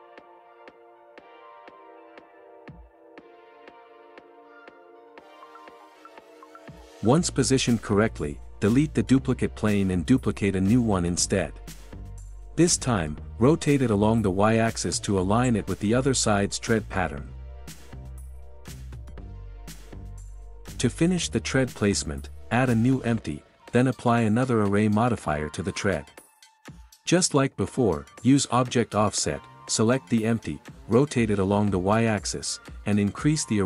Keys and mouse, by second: 14.3 ctrl+a, 17.3 ctrl+a, 21.2-25.5 drag, 30.0 click, 31.8 click, 32.5 click.